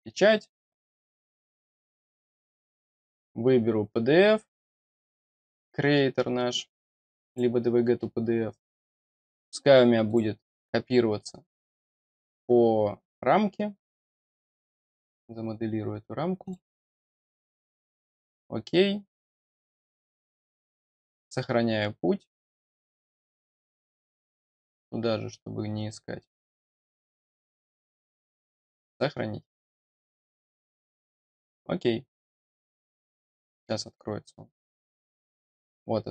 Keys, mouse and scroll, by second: 2.7 click, 7.2 click, 10.0 click, 12.9 click, 14.7 click, 16.3 click, 18.1 click, 20.3 click, 22.7 click, 25.0-25.9 scroll down 2, 26.3 click, 27.3 click, 28.8 click, 35.4-35.8 scroll down 2.